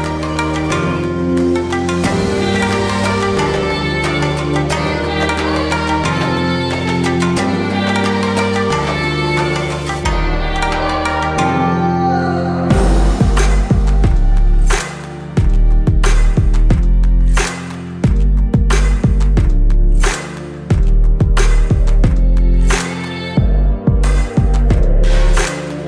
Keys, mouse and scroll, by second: 7.0-9.8 drag, 10.4-11.6 shift+drag, 14.2 alt+scroll up 1, 14.9 space, 14.9-15.9 drag, 20.5 right click, 21.3-24.9 drag.